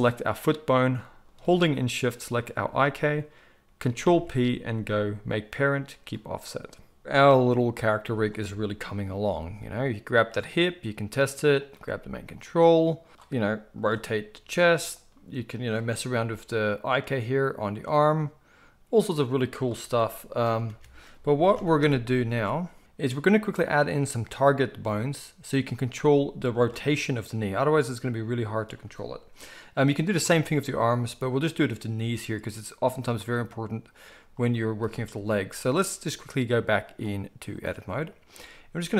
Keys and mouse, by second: 4.0 ctrl+p, 9.3 g, 11.7 g, 14.3 r, 15.6 click, 16.2 g, 19.8 r, 20.7 a, 21.5 alt+g, 21.8 alt+r, 22.3 alt+s, 23.0-24.2 middle drag, 24.2 click, 24.4-35.6 middle drag, 27.2 g, 35.6 click, 35.7-36.8 middle drag, 36.8-38.3 drag, 38.3-38.9 middle drag.